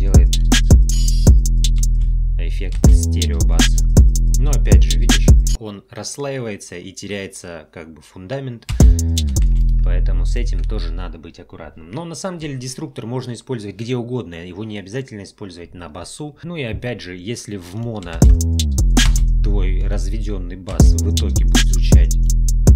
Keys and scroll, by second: 1.9 space, 8.7 space, 18.1 space, 20.7 space.